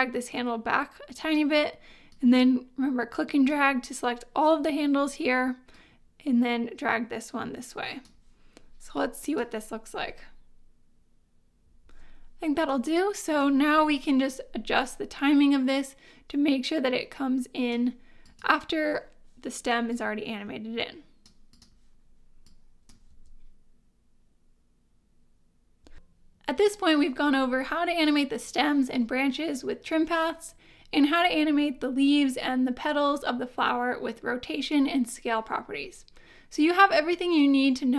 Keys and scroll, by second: 9.9 space, 11.8 space, 23.1 space, 25.8 space.